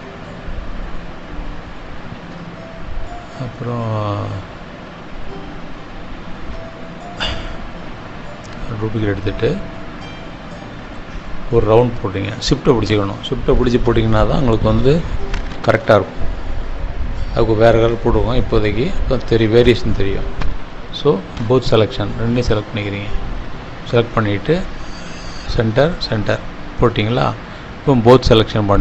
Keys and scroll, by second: 1.7 ctrl+-, 2.5 space.